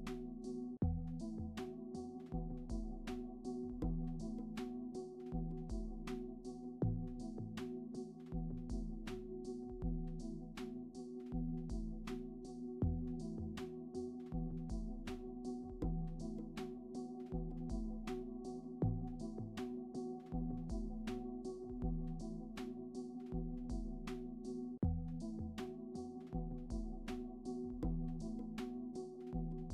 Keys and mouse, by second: 0.8 shift+c, 1.0 shift+a, 2.6 s, 3.0 g, 3.3 ctrl+a, 4.0 click, 4.4 click, 6.0 shift+click, 6.1 shift+click, 6.9 shift+click, 9.7 click, 12.4-13.6 shift+drag, 14.3 click, 14.9-16.2 shift+drag, 16.3 click, 17.1 shift+click, 18.9 click, 19.8 click, 20.0 click, 20.4 click, 21.0 click, 22.7 click, 23.4 click, 24.7 right drag, 24.9 right click, 25.0 right click, 25.2-25.6 middle drag, 26.1 click, 26.6-27.0 drag, 27.4 right click, 27.6 middle drag, 27.9 middle click, 28.0 r, 29.1 g, 29.6-29.7 middle drag.